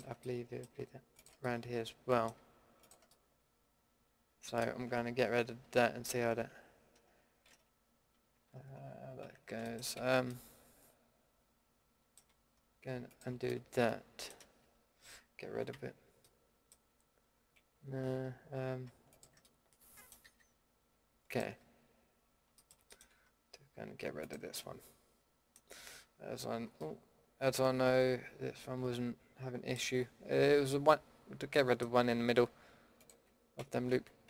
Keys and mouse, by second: 1.9-3.1 middle drag, 3.2-3.9 middle drag, 5.5 ctrl+x, 7.4 ctrl+z, 9.2 ctrl+x, 10.0 ctrl+z, 15.7 ctrl+x, 17.8 ctrl+z, 20.2 a, 29.0 middle click, 30.7-31.1 middle drag, 31.3-32.0 middle drag.